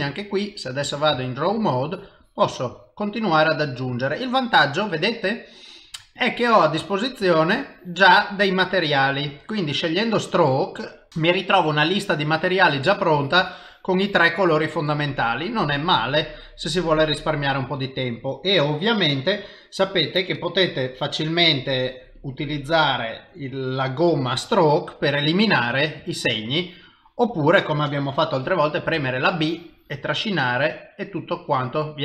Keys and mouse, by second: 1.2 shift+middle click, 1.9 click, 2.2 click, 2.5 click, 2.7 click, 3.0 click, 6.2 click, 6.8 click, 7.2 click, 7.6 click, 8.2 click, 8.7 click, 9.2 click, 9.5 click, 10.0 middle click, 12.3 click, 12.9 click, 13.2 click, 13.4 click, 14.7 middle click, 18.6 middle click, 20.8 click, 22.2 click, 23.1 click, 25.0 click, 26.0 click, 26.5 click, 27.3 click, 29.0 b, 30.9 middle click.